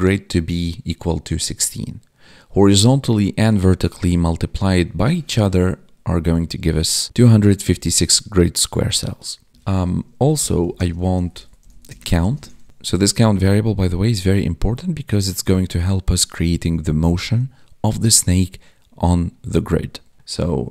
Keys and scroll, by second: 10.7 space, 11.8 space, 12.1 space, 12.9 Up, 15.3 Down.